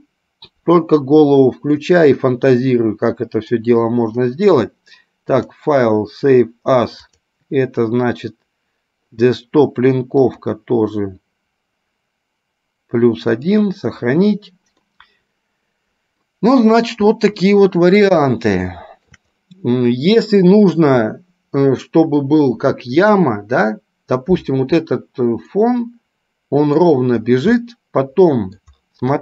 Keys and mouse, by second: 2.0-3.9 middle drag, 5.4-7.7 drag, 15.2-16.6 middle drag, 18.5-19.5 shift+middle drag, 25.9-27.1 middle drag, 27.9-28.9 middle drag.